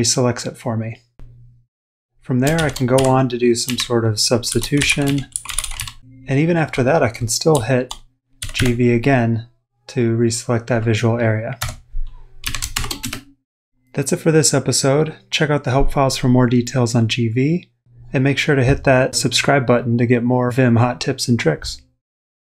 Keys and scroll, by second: 0.2-0.9 typing, 2.3-5.5 typing, 5.9 Return, 7.5-9.0 typing, 11.6 Escape, 12.4-13.0 typing.